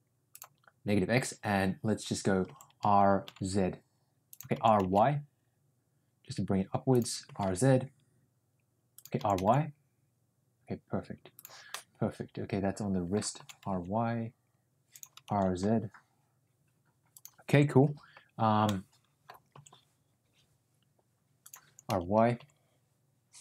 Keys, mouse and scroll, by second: 2.4 r, 4.5 r, 7.2 r, 9.1 r, 11.6-13.1 middle drag, 13.3 r, 15.3 r, 18.6 middle click, 19.5 r, 21.6 r.